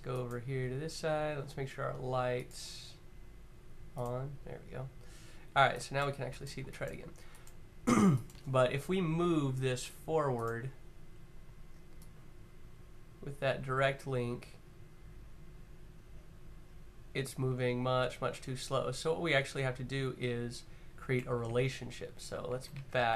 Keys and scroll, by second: 21.9 z, 22.5 super+z, 22.8 super+z, 23.0 super+z.